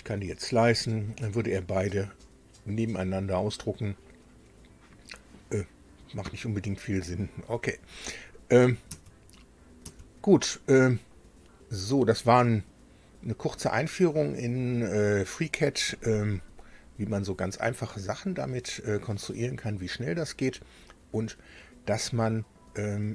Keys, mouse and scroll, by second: 8.9 alt+Tab.